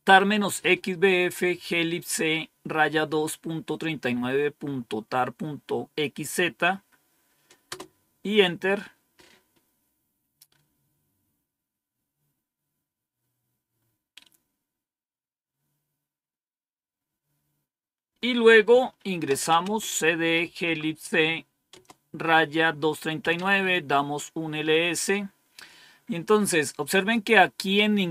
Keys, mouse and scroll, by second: 7.5 Return, 18.9-20.7 typing, 21.6 Return, 22.8-23.5 typing, 23.8 Return, 27.5-28.0 scroll down 1.